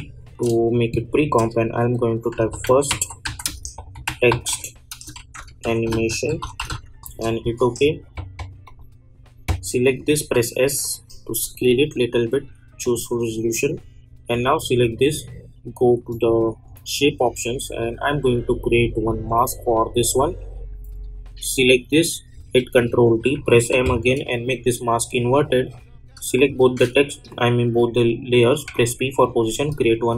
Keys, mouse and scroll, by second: 2.1-7.1 typing, 8.6 click, 10.2 s, 10.8-21.5 drag, 22.6 ctrl+d, 23.7 m, 24.4 click, 26.3 shift+click, 28.6 p, 29.6-30.1 drag.